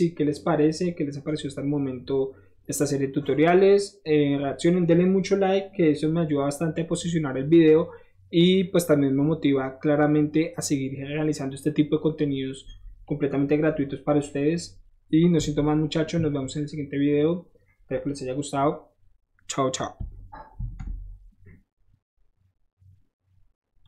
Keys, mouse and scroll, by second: 5.1 middle click, 5.5-5.9 middle drag, 6.7-13.0 middle drag, 13.5-14.0 middle drag, 14.6 middle click, 15.5 KP_1, 16.1 KP_3, 17.7 middle drag, 18.0-18.5 middle drag, 20.5 ctrl+s, 23.8 click.